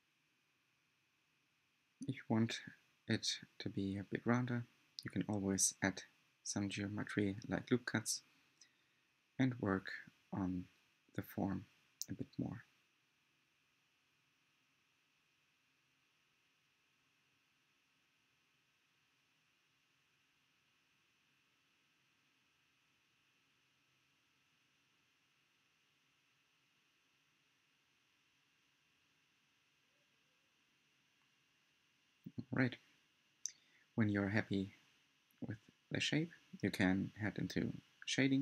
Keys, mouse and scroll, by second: 1.3 click, 1.6 shift+middle click, 2.5 click, 2.6 scroll down 1, 2.8 shift+middle drag, 3.0 click, 3.4 scroll down 1, 3.6 shift+middle click, 4.1 scroll up 4, 4.3-5.1 shift+middle drag, 5.1 shift+click, 7.7 click, 8.3 click, 8.7 shift+click, 9.1 shift+click, 9.2-9.7 shift+middle drag, 10.3 shift+click, 10.4 shift+middle click, 10.9 shift+click, 11.4 shift+click, 11.8 shift+click, 12.0 shift+middle drag, 12.2-12.6 shift+scroll down 1, 12.6 shift+Left, 12.8-13.2 scroll down 3, 12.9 middle click, 13.3-14.4 shift+middle drag, 14.4 s, 16.3-16.9 scroll up 6, 16.4 shift+middle click, 16.9-17.3 shift+middle drag, 17.3 2, 18.4 click, 18.7 shift+middle click, 18.8 scroll down 10, 19.0 shift+middle click, 19.2 scroll up 7, 19.3 shift+middle click, 19.9 shift+click, 20.0 scroll down 1, 20.1 middle click, 20.7 s, 22.3-22.9 scroll up 3, 22.9 Tab, 23.0-23.5 scroll down 5, 23.1 middle drag, 23.5 Tab, 24.4 click, 24.4 Tab, 24.7 alt+z, 24.8 middle click, 25.5 right drag, 25.7 scroll up 2, 25.8-26.6 middle drag, 26.6 scroll up 7, 26.9 Tab, 27.0 middle click, 27.6 1, 28.0 click, 28.2 g, 29.0 shift+middle click, 29.1 shift+scroll down 6, 29.3 shift+middle click, 29.8 click, 29.9 middle click, 30.3 click, 30.7 g, 31.5-31.9 scroll down 12, 31.6 middle click, 31.9-32.2 shift+scroll up 9, 31.9 shift+middle drag, 32.2 shift+middle click, 32.3-32.9 scroll down 8, 32.6 shift+middle click, 32.9 shift+middle click, 33.0-33.3 scroll up 3, 33.3 shift+middle click, 33.9 click, 34.1 g, 34.6-35.7 shift+middle drag, 35.7 click, 35.9 g, 36.9 Tab, 37.0 scroll down 6, 37.3-38.4 middle drag.